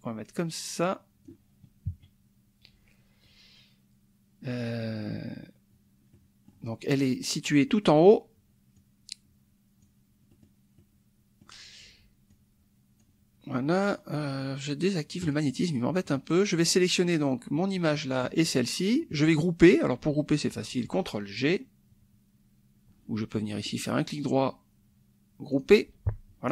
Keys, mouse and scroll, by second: 1.9 KP_Subtract, 6.1 middle click, 8.7-10.0 drag, 10.3 middle click, 10.8 middle click, 12.3 click, 15.2 click, 16.5 click, 18.4 shift+click, 23.8 right click, 25.5 click.